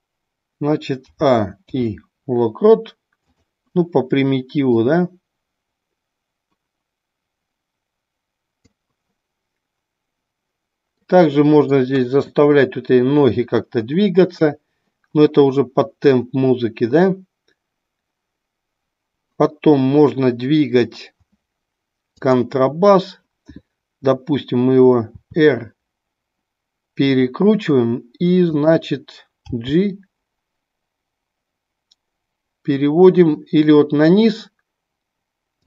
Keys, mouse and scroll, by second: 4.9-8.8 drag, 11.0 middle click, 22.1 click, 27.2 click, 28.5 click.